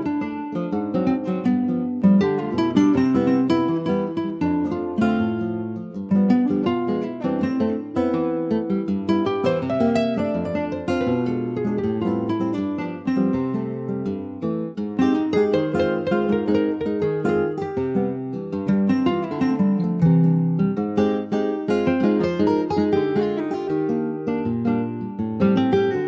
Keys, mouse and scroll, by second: 0.2-0.9 scroll up 2, 0.9-2.1 drag, 2.1 s, 4.9 s, 6.7 alt+z, 6.9 click, 7.2 scroll down 2, 7.3 middle click, 7.7 Tab, 8.0 click, 8.2-9.4 middle drag, 9.4 ctrl+s, 9.7 middle click, 9.9-10.3 scroll up 1, 10.3-11.4 shift+middle drag, 11.4 ctrl+s, 11.4 click, 11.8 Tab, 12.4 Tab, 12.7 click, 12.9 scroll down 1, 13.1-14.9 middle drag, 14.9 ctrl+s, 15.0 click, 15.2 middle click, 16.1 ctrl+s, 16.3 click, 16.8 shift+middle click, 17.0 shift+scroll up 2, 17.2 middle click, 17.6 scroll up 1, 17.8 shift+middle click, 18.2-18.7 shift+scroll up 7, 18.7 ctrl+s, 19.1 click, 19.3 Tab, 20.0 middle click, 20.7 Tab, 21.0-21.4 scroll down 3, 21.4 click, 21.9 middle click, 22.3 s, 22.5 click, 22.8 Tab, 23.6 click, 24.2 alt+middle click, 24.8 alt+z.